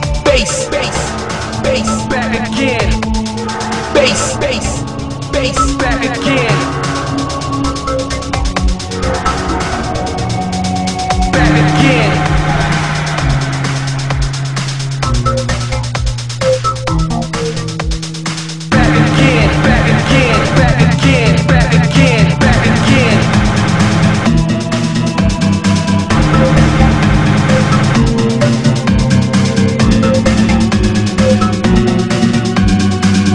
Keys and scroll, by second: 9.0 ctrl+z, 14.3 ctrl+z, 17.8 ctrl+z, 18.5 ctrl+z, 32.2 ctrl+z.